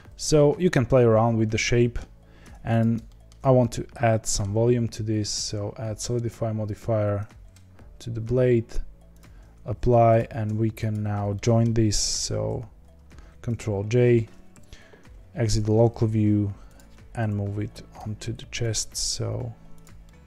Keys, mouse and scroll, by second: 0.3 scroll down 2, 0.6-2.4 middle drag, 2.4 Tab, 2.7 click, 3.0-3.5 shift+middle drag, 3.5-3.9 scroll up 1, 3.9-4.4 middle drag, 4.4-6.7 scroll down 1, 6.7-9.2 drag, 10.9 shift+click, 11.3-12.4 middle drag, 12.4 ctrl+j, 14.5 KP_Divide, 16.0 g, 17.1 KP_7, 17.9 g, 18.8 r, 20.0 middle click.